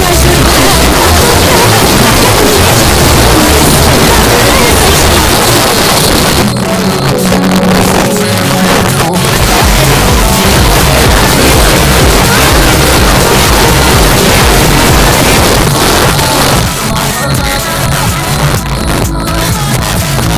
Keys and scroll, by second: 5.3 Page_Down, 15.4 Page_Down.